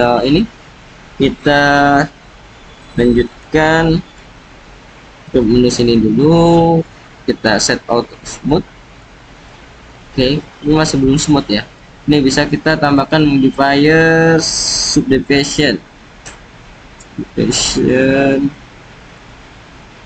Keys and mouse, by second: 0.2-0.7 drag, 3.2-4.0 drag, 5.2 Tab, 6.4 click, 8.4-8.8 middle drag, 8.8 right click, 9.8 click, 10.8-11.7 drag, 13.0-15.2 drag, 17.1-17.8 drag.